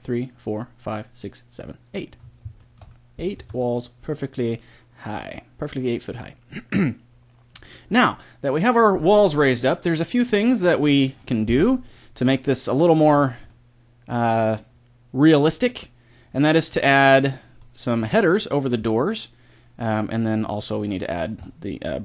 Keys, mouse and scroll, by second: 2.2 middle click, 3.4 Tab, 9.0 middle click, 9.4-11.6 middle drag, 13.4-15.4 middle drag, 16.2-18.0 middle drag, 20.3 middle click.